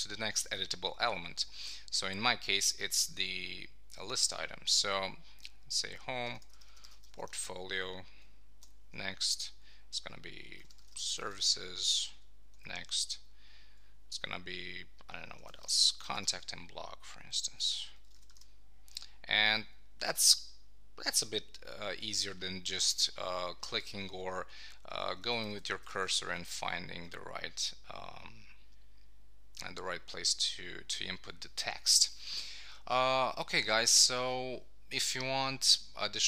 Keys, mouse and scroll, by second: 6.2 shift+p, 8.6 ctrl+alt+Right, 11.1 shift+s, 12.5 ctrl+alt+Right, 15.5 shift+c, 17.3 ctrl+alt+Right, 19.8 shift+b, 24.8 Up, 25.6 Left, 26.0 Down.